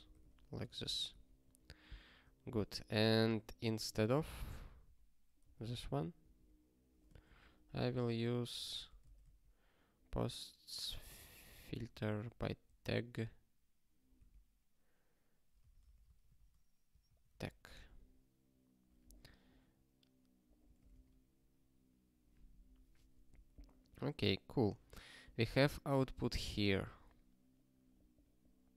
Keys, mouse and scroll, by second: 0.0-0.3 typing, 1.0 ctrl+n, 1.4 ctrl+s, 2.3 ctrl+n, 2.5 ctrl+n, 4.0 ctrl+e, 4.5 alt+b, 4.6 alt+b, 5.4 alt+d, 5.6 alt+d, 6.9-9.7 typing, 11.6 i, 12.0 alt+/, 12.6 space, 14.1 ', 15.3-16.3 typing, 17.0 ctrl+n, 17.9 ctrl+s, 19.3 scroll down 1, 21.0 ctrl+k.